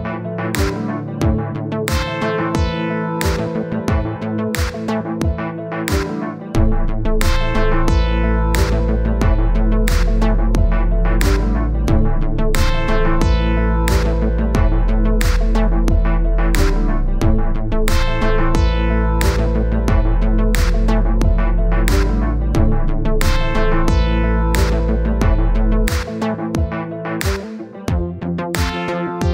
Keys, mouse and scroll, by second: 0.7 middle click, 1.1-3.2 drag, 3.3 middle click, 3.6 click, 4.2 middle click, 4.7 click, 5.7 middle click, 6.4-8.0 drag, 8.0 middle click, 8.9-10.9 drag, 10.9 middle click, 11.1 scroll down 1, 11.3-14.2 drag, 14.2 middle click, 14.8 scroll up 2, 14.9-15.3 scroll down 2, 15.3-17.2 drag, 17.2 middle click, 18.1-19.1 drag, 19.1 middle click, 19.8-21.0 drag, 21.4-24.5 drag, 24.5 middle click, 24.9 scroll up 1, 25.1 scroll down 2, 25.2 middle click, 25.5-29.2 drag, 29.2 middle click.